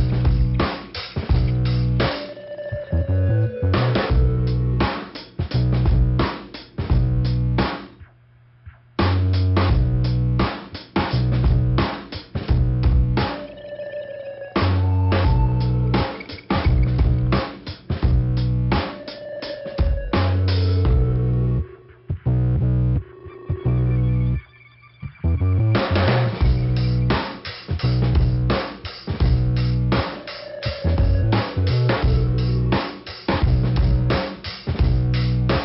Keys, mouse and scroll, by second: 0.9 click, 1.9 click, 2.5 click, 3.3 click, 4.5 scroll up 1, 6.5 click, 6.7 click, 9.2 click, 9.4 click, 10.9 click, 11.0 click, 11.9 click, 12.8 click, 13.7 click, 14.6 click, 16.2 click, 17.1 click, 17.3 click, 17.9 click, 19.1 click, 20.5 scroll up 1, 24.7 middle click, 25.5 scroll up 1, 26.1-26.6 scroll down 2, 26.6 click, 26.7 click, 27.1 middle click, 29.2 click, 31.7 click, 33.3 click, 33.3 click, 33.9 middle click, 34.9 click.